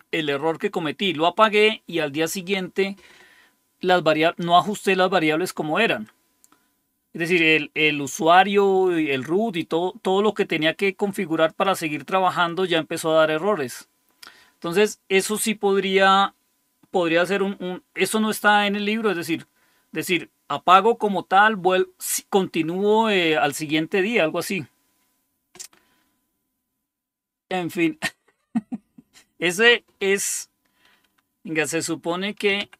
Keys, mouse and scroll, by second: 4.8 click, 6.0-7.2 drag, 11.4 click, 32.2-32.7 typing.